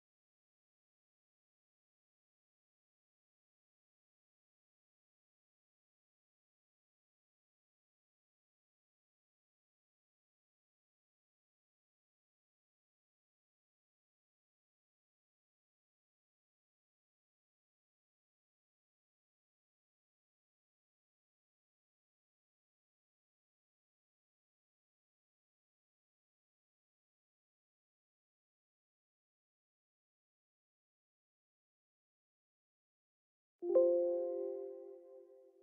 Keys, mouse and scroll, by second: 5.4 click, 8.1 click, 10.5 click, 13.3 click, 18.6 click, 19.8 right click, 20.7 click, 20.8-27.6 drag, 27.6 Escape, 32.1 right click, 33.2 click.